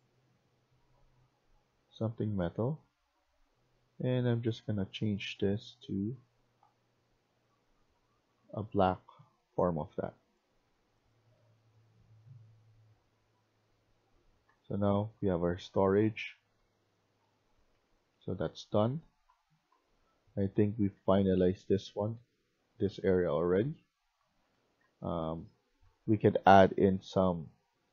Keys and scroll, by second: 14.1-22.9 typing, 24.3-26.6 typing, 27.7 w.